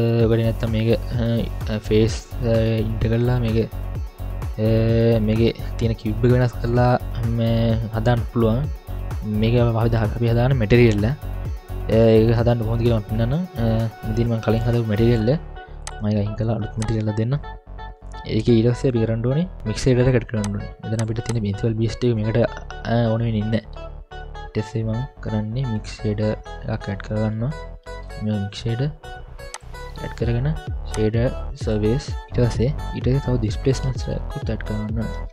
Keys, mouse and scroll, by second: 0.8-2.0 middle drag, 0.8-2.0 scroll up 1, 2.4-3.0 scroll down 3, 2.9 scroll up 1, 3.0-3.5 middle drag, 3.8-4.5 scroll up 1, 4.5-5.2 middle drag, 4.5-5.2 scroll up 2, 5.7-6.1 middle drag, 6.3-7.8 scroll down 3, 6.8-7.8 scroll up 1, 7.8-8.5 middle drag, 7.8-8.5 scroll up 1, 10.7 scroll down 1, 15.8-16.4 drag, 16.8 click, 18.0 middle click, 19.6-20.4 scroll up 1, 20.4-21.0 drag, 21.3 click, 23.8 Delete, 25.0 middle click, 25.8-26.3 scroll down 1, 26.3 scroll down 1, 26.9 ctrl+alt+a, 30.1 middle click, 30.9-31.8 drag, 32.2 middle click, 32.2 scroll up 1, 34.0 ctrl+alt+a.